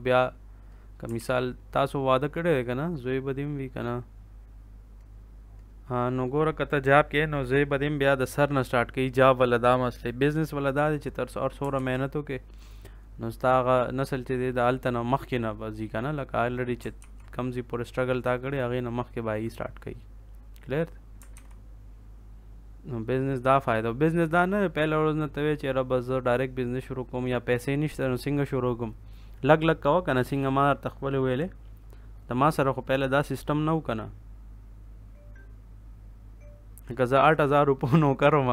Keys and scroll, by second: 1.1 ctrl+s, 11.7 ctrl+s, 16.9 ctrl+s, 21.3 ctrl+s.